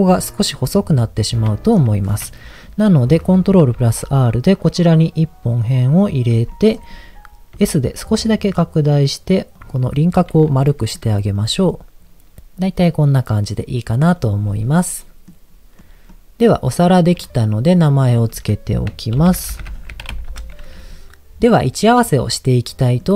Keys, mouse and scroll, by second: 1.1-1.5 scroll down 2, 1.5 shift+middle click, 3.7 ctrl+r, 6.1 right click, 6.5 middle click, 7.5 s, 9.5 click, 10.3 middle click, 11.0 Tab, 11.3 click, 11.5-14.1 middle drag, 14.1-14.5 scroll down 1, 14.5 middle click, 15.7 middle click, 16.3 middle click, 17.1 click, 18.0 click, 18.2-20.4 drag, 21.1-23.0 middle drag.